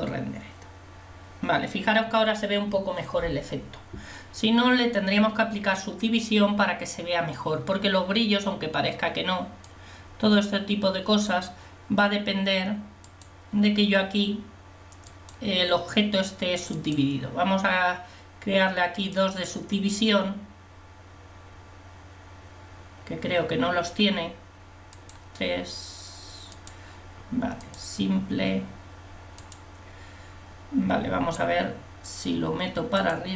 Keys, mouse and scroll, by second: 0.0 click.